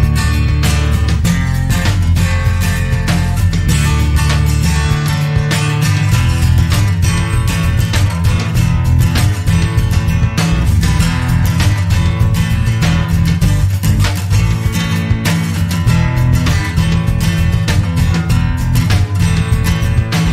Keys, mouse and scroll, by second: 1.2-1.5 scroll up 2, 2.4 click, 7.2-7.7 scroll down 2, 8.4 click, 12.3 scroll up 2, 13.5 scroll down 2, 14.7 click, 15.5 click, 15.8 click, 18.6-19.1 scroll down 2, 19.6 click.